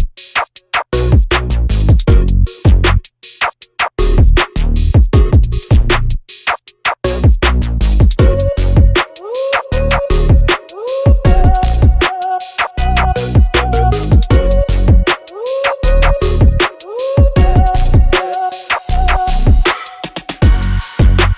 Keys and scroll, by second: 1.3 r, 3.0 space, 3.3 p, 4.2 5, 4.5 Return, 6.0 5, 6.2 Return, 6.4 space, 16.2 m, 19.5 space, 21.0 m.